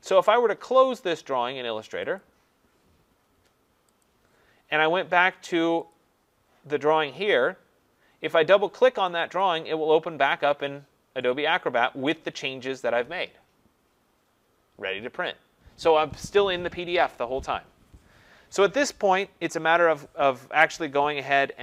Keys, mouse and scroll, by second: 2.2 click, 4.1 click, 5.9 click, 9.5 click.